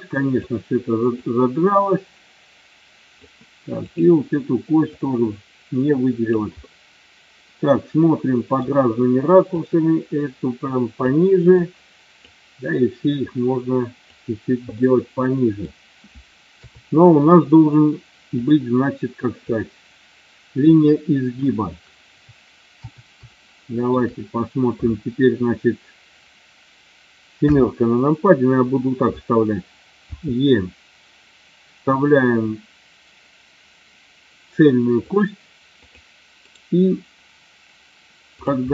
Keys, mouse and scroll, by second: 1.1-3.1 drag, 3.8 click, 4.9-6.4 drag, 6.6-8.5 middle drag, 9.6-11.0 drag, 11.6 click, 13.0-14.2 drag, 14.8 middle click, 16.5 KP_3, 18.4 click, 19.5-20.6 drag, 23.4 shift+middle click, 27.4 KP_7, 30.1 e, 35.7 click, 36.5-38.0 right drag, 38.4 click.